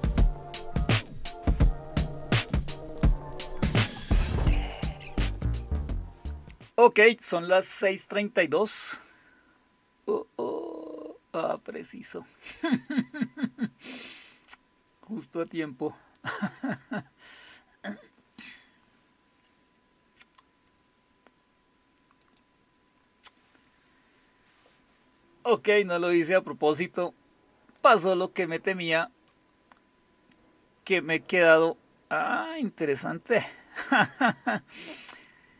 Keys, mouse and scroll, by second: 0.9 click, 0.9 Up, 0.9 Return, 2.8 Up, 2.8 Return, 4.6 click, 11.6 click, 16.4 click, 22.2 click, 27.8 click.